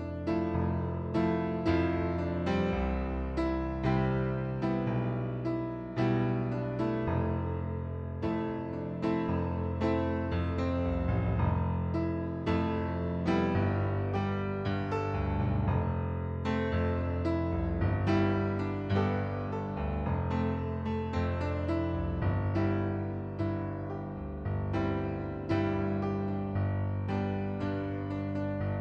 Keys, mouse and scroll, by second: 0.5 middle click, 1.2 click, 3.2 click, 4.7 KP_6, 5.5 KP_2, 5.6 Return, 6.4 click, 7.0 KP_6, 7.2 KP_2, 7.5 Return, 8.8 click, 9.7 click, 11.0 click, 11.8 click, 12.6 click, 13.6 click, 15.1 click, 17.1 middle click, 17.9 middle click, 18.5 click, 19.1 middle click, 20.0 click, 23.0 right click, 23.6 click, 26.1 click, 26.9 right click, 27.7 middle click, 28.7 click.